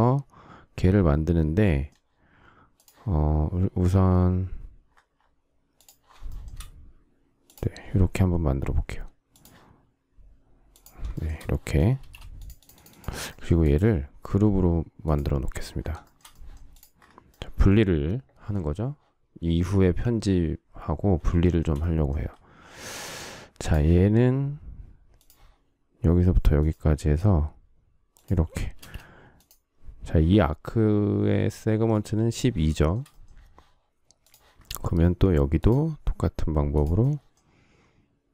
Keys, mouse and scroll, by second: 6.2 shift+middle click, 11.1 shift+middle click, 11.9 space, 16.0 shift+middle click, 21.4 shift+middle click, 28.7 space, 32.7 shift+middle click.